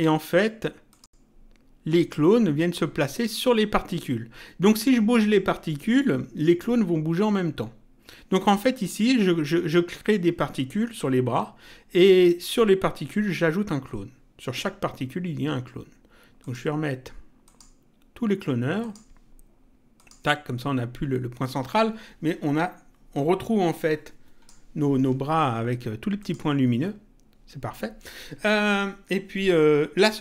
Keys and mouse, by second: 0.9 click, 16.4 click, 18.8 click, 19.9 click, 23.1 click, 26.2 click.